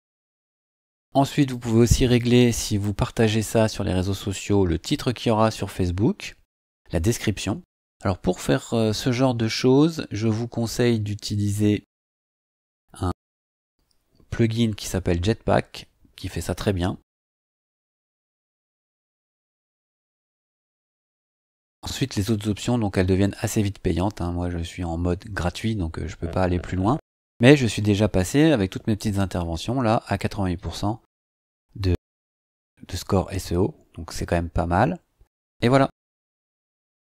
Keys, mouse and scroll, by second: 0.7-1.3 scroll up 1, 1.3 click, 4.3 scroll up 2, 6.5 scroll down 2, 18.5 click.